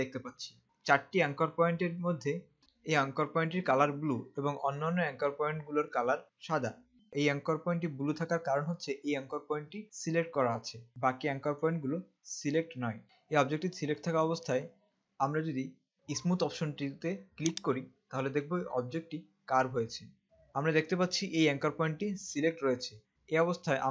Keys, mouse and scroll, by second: 1.8-2.6 scroll up 1, 2.6 space, 17.9 click.